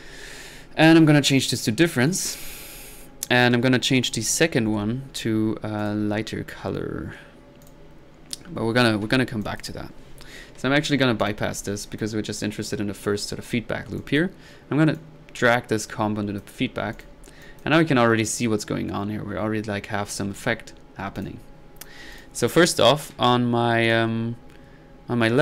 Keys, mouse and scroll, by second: 1.3-1.8 drag, 2.1 click, 2.7 click, 5.8-6.2 drag, 7.6-8.0 drag, 11.2 drag, 11.8-12.2 drag, 12.5 click, 14.0 drag, 15.0-16.5 drag, 17.0 drag, 17.4 drag, 20.2-20.6 drag, 20.8 middle click, 21.2 click.